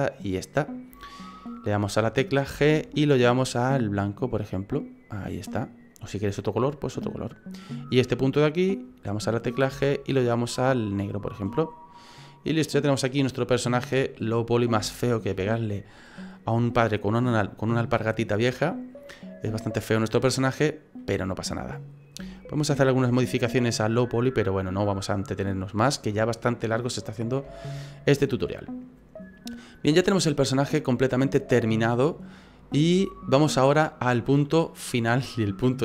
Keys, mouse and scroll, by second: 2.5 g, 7.0 right click, 9.7 g, 11.4 right click, 11.7-12.2 scroll down 3, 12.1 middle click, 13.1-14.0 scroll down 4, 13.4 middle click, 14.3-14.8 scroll up 5, 14.9 shift+middle click, 15.5 middle click, 19.1 middle click, 21.0 middle click, 21.9-22.3 scroll up 3, 22.3 shift+middle click, 22.6 shift+middle click, 22.8 middle click, 26.4-27.1 scroll down 2, 27.2 scroll down 2, 27.7 shift+middle click, 28.2 middle click, 30.4 click, 31.3 middle click.